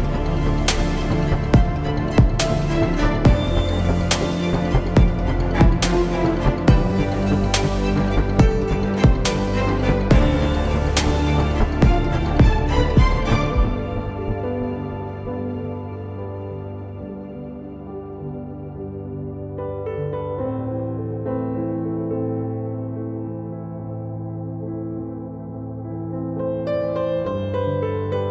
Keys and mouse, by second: 0.3 z, 1.1 e, 2.1 Tab, 2.5 z, 11.9 z, 12.2 z, 12.9 z, 13.3 z, 13.5 Tab, 14.4 ctrl+Tab, 15.3 z, 15.7 c, 16.6 z, 19.0 Tab, 20.9 r.